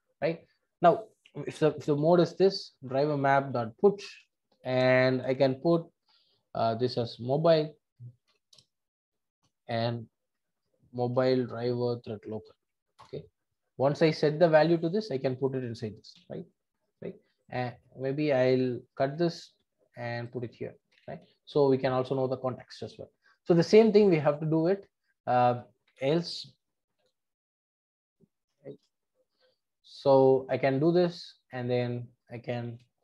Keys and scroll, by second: 2.9 Return, 10.6 Return, 19.0 super+x, 20.8 super+x, 21.0 super+v, 32.6 super+c.